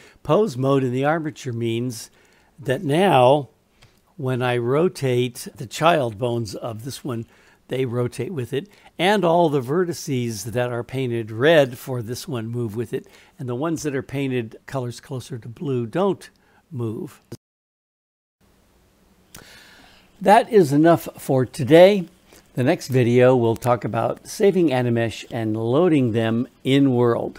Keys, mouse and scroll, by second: 3.8 r, 17.3 click, 17.3 r.